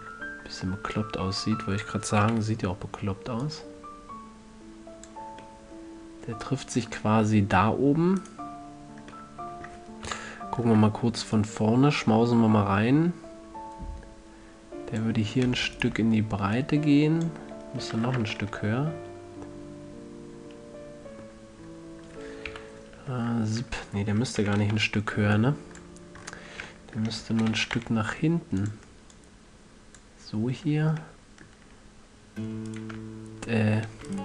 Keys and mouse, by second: 1.3-3.2 drag, 2.6 KP_3, 3.2-3.8 middle drag, 3.8-5.6 drag, 5.6 middle click, 5.9 click, 6.4-7.8 middle drag, 8.5-10.4 drag, 10.4 KP_1, 11.7-13.6 drag, 16.1-18.2 right drag, 16.9-18.7 drag, 18.2 a, 18.5 Tab, 22.0 middle click, 22.8 KP_3, 23.4 Tab, 24.8 z, 25.1 b, 27.6 g, 29.0-31.3 drag, 31.3-31.7 middle drag, 33.0-34.2 right drag.